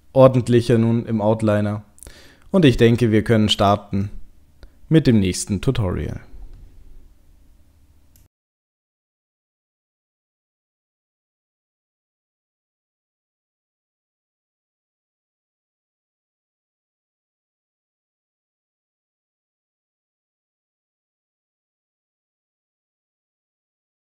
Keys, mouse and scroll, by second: 1.1-1.7 scroll down 2, 1.7 scroll up 1, 3.6 click, 4.6 middle click, 5.1 middle click.